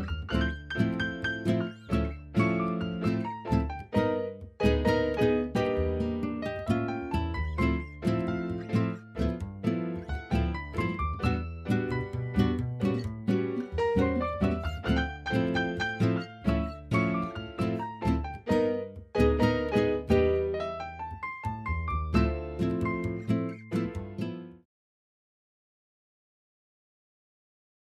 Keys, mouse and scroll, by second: 2.6 shift+middle click, 5.0 ctrl+s, 5.8-6.5 middle drag, 7.1 middle click, 8.2-9.1 drag.